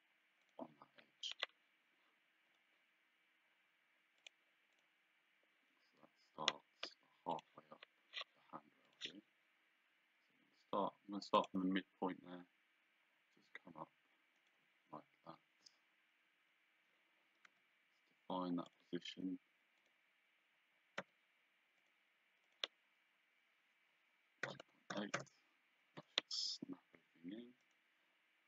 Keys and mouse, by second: 4.3 click, 7.4 click, 8.9 click, 11.5 click, 14.4 click, 15.3 Escape, 18.8 click, 19.9 click, 21.2 d, 21.9 click, 24.5 KP_2, 25.2 Return, 26.3 Escape, 27.7 right click.